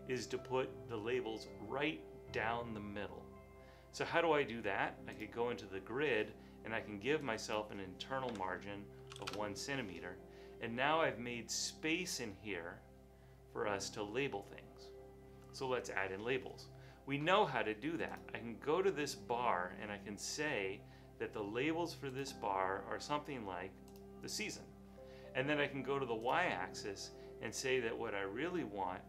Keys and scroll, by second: 8.4-9.7 typing, 12.4 typing.